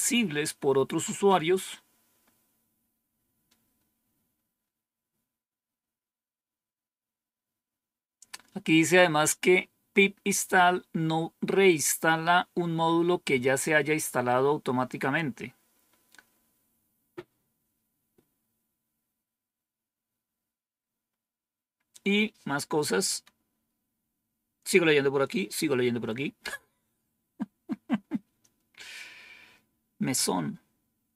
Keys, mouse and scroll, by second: 1.6 scroll down 1, 2.2-2.9 scroll down 1.